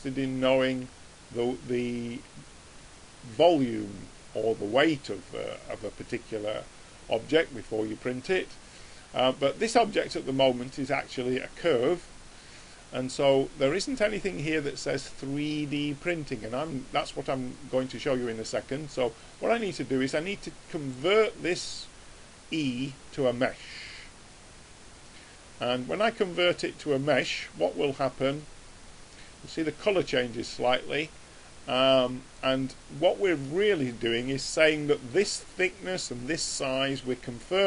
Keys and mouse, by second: 9.0 click, 19.3 click, 29.6-37.6 middle drag.